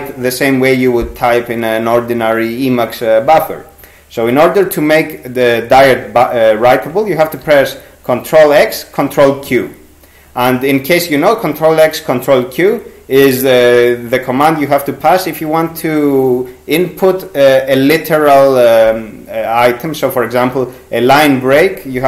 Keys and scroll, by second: 7.5 ctrl+x, 8.6 ctrl+q.